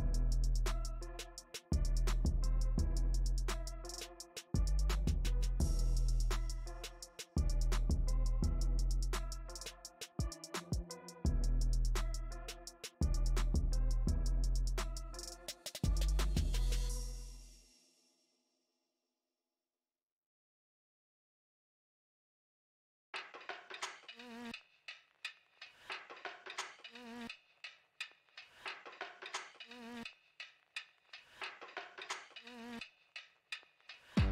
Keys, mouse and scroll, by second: 6.6 middle click, 7.1-9.2 drag, 9.2-10.5 middle drag, 10.5 shift+click, 11.3-26.7 middle drag, 26.7 click, 27.2-28.6 middle drag, 28.6 shift+c, 29.2 f, 31.1-34.3 drag.